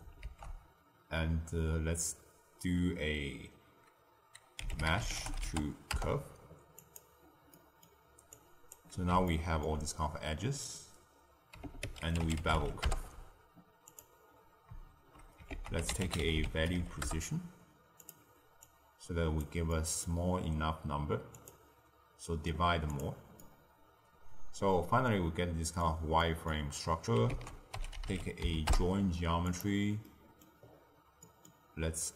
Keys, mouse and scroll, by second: 0.1 ctrl+a, 7.5 middle click, 8.3 click, 9.2-11.8 ctrl+middle drag, 11.8 ctrl+a, 15.5 ctrl+a, 18.5 drag, 19.6-20.5 middle drag, 20.5-21.3 scroll up 2, 21.3-23.0 drag, 23.3-26.6 middle drag, 26.6-27.3 scroll down 1, 27.3 ctrl+a, 30.0-30.6 middle drag, 30.6-31.2 scroll down 2, 31.2-32.1 middle drag.